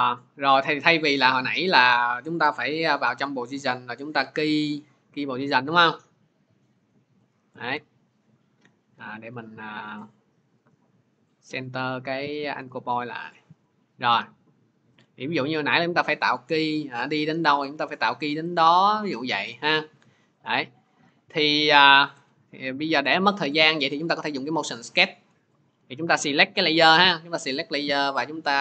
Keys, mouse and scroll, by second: 2.3 p, 3.6 click, 4.5 click, 7.0 click, 7.5 ctrl+z, 8.8 ctrl+z, 10.5 click, 13.2 click, 15.9 click, 17.5 click, 18.6 click, 22.8 ctrl+z, 23.2 ctrl+z, 25.9 ctrl+z, 26.0 click, 26.8 click.